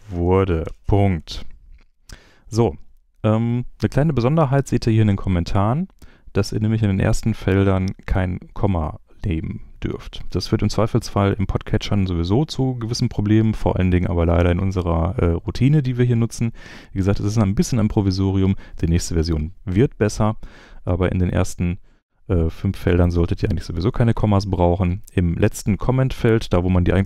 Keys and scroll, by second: 0.0-1.1 typing, 1.1 super+Left.